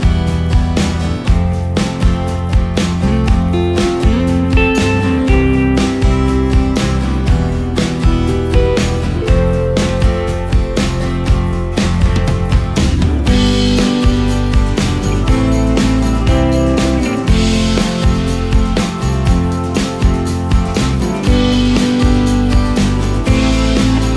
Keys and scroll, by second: 0.7 space, 14.3 ctrl+z, 14.6 ctrl+space, 17.7 ctrl+space, 21.8 ctrl+space, 22.5 ctrl+space.